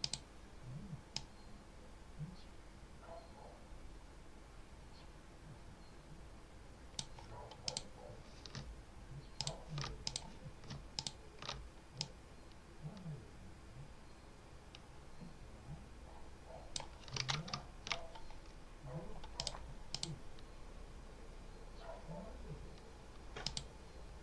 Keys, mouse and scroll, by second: 1.0-7.0 drag, 7.6 click, 9.2 ctrl+alt+click, 9.9 ctrl+alt+click, 10.8 ctrl+alt+click, 11.9-16.8 drag, 17.0 ctrl+s, 17.4 scroll down 2, 18.4 scroll down 2, 19.2 click, 19.8 click, 23.3 click.